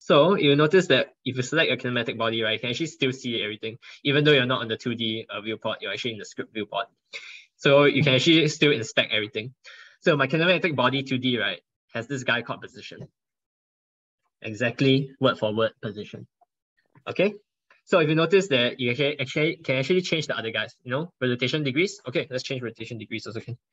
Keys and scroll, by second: 22.7 ctrl+BackSpace.